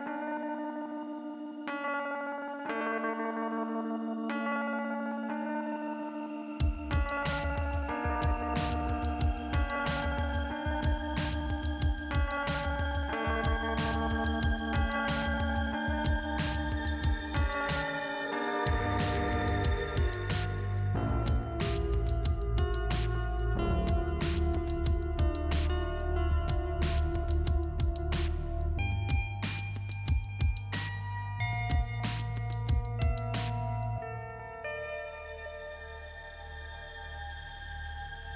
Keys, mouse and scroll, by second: 0.4 double click, 0.6 double click, 1.0 double click, 1.1 double click, 1.3 double click, 1.7 double click, 1.8 double click, 2.2 double click, 2.9 click, 3.3 middle click, 4.6 click, 5.3 click, 5.6 click, 5.9 click, 6.0 double click, 6.4 double click, 7.0 click, 7.4 click, 7.8 double click, 8.2 double click, 8.6 double click, 9.2 click, 10.3 middle click, 11.3 click, 11.7 double click, 12.2 double click, 12.6 double click, 13.1 click, 14.0 click, 14.6 click, 15.2 click, 15.7 double click, 16.2 double click, 16.8 right click, 18.1 click, 18.8 click, 19.4 click, 20.4 click, 21.6 click, 22.4 click, 23.9 click, 24.8-25.7 scroll down 2, 25.7 p, 26.3-26.6 scroll down 2, 27.9-29.1 scroll up 2, 29.5 click, 30.9 click, 33.3 k, 33.9 middle click, 35.4 click, 37.9 click.